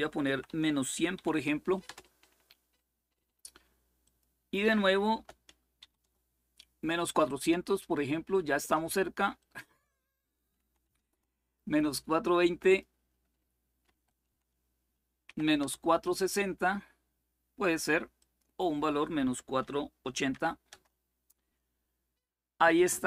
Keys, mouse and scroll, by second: 0.0-1.4 typing, 1.6 Return, 3.8 click, 4.9 BackSpace, 5.5 4, 5.8 Return, 9.1 click, 10.3 Delete, 10.6 2, 10.8 Return, 12.4 click, 13.6 Left, 14.0 Delete, 15.0 6, 15.3 Return, 17.9 click, 19.1 Delete, 20.1 8, 20.4 Return.